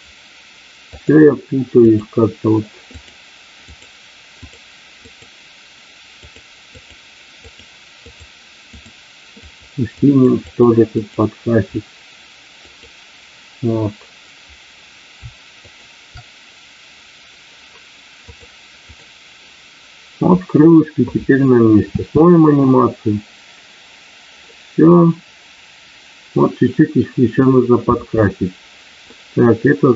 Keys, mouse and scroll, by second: 1.0-2.1 drag, 3.0 click, 3.6 click, 4.3 click, 5.0 click, 6.1 click, 6.7 click, 7.5 click, 8.0 click, 8.7 click, 9.3 click, 10.0 click, 10.5 click, 11.0 click, 12.6 click, 18.2 click, 21.8 space, 27.9 space, 29.0-29.9 middle drag.